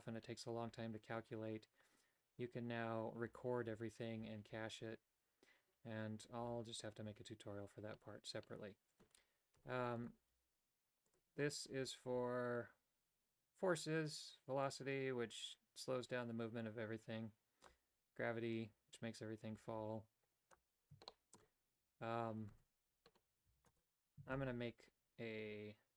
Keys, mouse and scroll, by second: 9.7 Tab, 10.4 g, 14.8-17.8 drag, 18.6-20.6 drag, 21.1 shift+middle click, 22.8 Tab, 23.6 x, 24.3 shift+a.